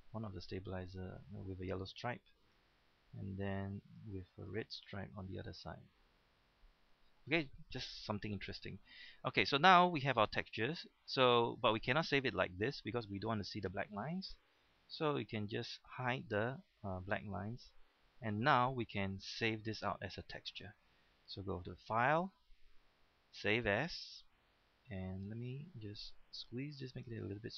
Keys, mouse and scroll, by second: 23.8 click.